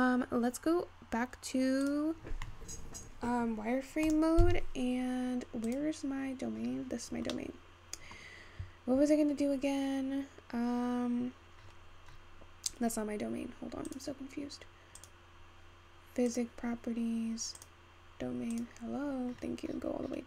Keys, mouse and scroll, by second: 1.5-4.9 scroll up 1, 4.9 click, 5.3-8.9 scroll up 3, 8.9-13.2 middle drag, 13.2-16.7 scroll down 10, 16.7 click.